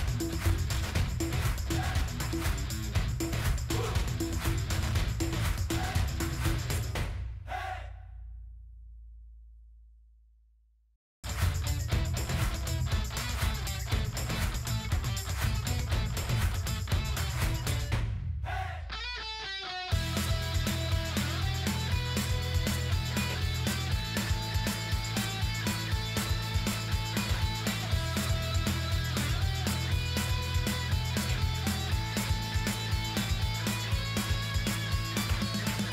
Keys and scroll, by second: 22.3 ctrl+v.